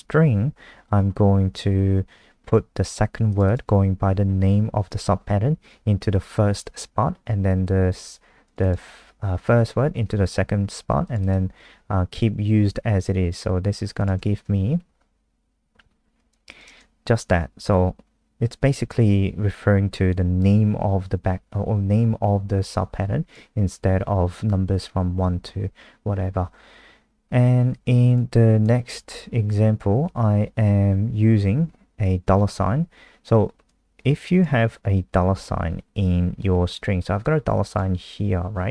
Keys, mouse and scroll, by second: 3.4 click, 8.4 click, 8.6 click, 11.0 click, 11.2 click, 14.0 click, 14.1 ctrl+s, 14.5 F5, 16.1 click, 16.5 click, 22.9 click.